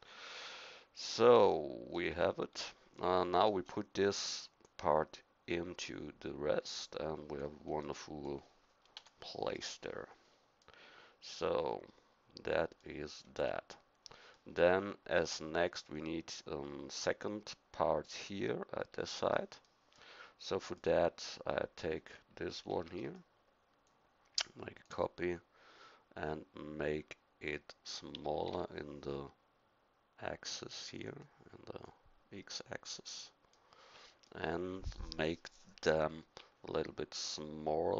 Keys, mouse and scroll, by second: 9.0 KP_1, 22.7 shift+d, 23.8-25.9 drag, 28.1 s, 31.8-33.5 drag, 33.5 middle click.